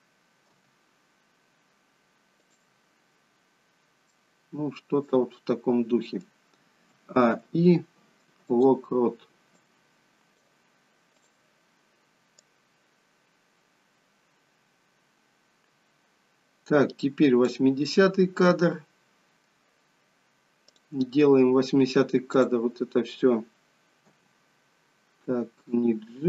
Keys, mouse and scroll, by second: 0.4 g, 4.1 middle click, 5.4 middle click, 6.8 a, 7.2 i, 9.5 click, 11.1 click, 12.6 click, 19.3 middle click, 20.6 click, 22.2 click, 24.2 g.